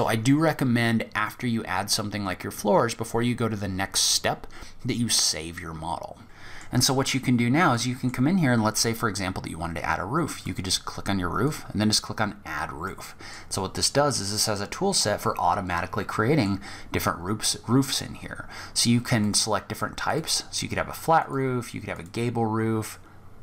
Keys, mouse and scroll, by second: 5.6 click, 6.2 middle click, 6.2 scroll up 3, 6.6-6.9 scroll down 2, 6.9 middle click, 9.6 click, 10.7 click, 11.6-13.4 scroll up 2, 12.0 middle click, 13.4-14.1 scroll down 3, 13.7-14.6 scroll up 2, 14.1 middle click, 16.0-16.3 scroll down 2, 18.4 click, 20.4 click.